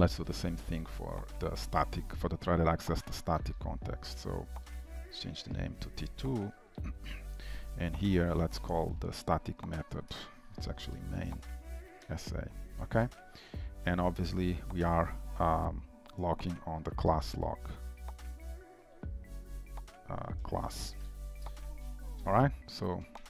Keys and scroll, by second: 0.0 ctrl+d, 0.0 shift+Return, 2.3 Delete, 6.5 Delete, 12.0 Return, 16.2 ctrl+w, 18.2 ctrl+c, 19.0 ctrl+v, 19.2 ctrl+w, 21.5 ctrl+s, 23.2 ctrl+s, 23.2 shift+Return.